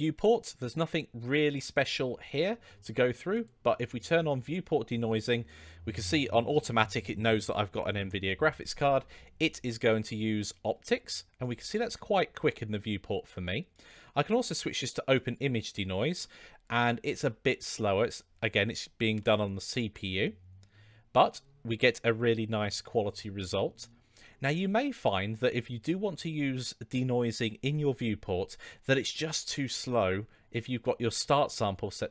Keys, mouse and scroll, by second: 3.3 click, 4.4 click, 9.8-10.7 middle drag, 11.4-12.0 middle drag, 13.7-15.5 drag, 16.7-17.7 middle drag, 19.1-19.9 middle drag, 28.5-29.1 middle drag.